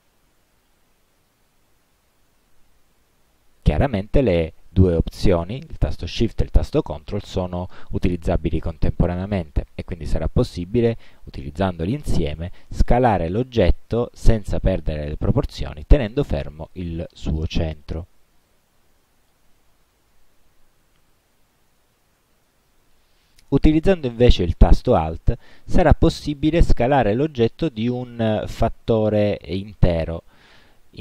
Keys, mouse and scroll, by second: 0.7-4.0 shift+drag, 13.9-18.7 ctrl+shift+drag, 25.5-31.0 alt+drag.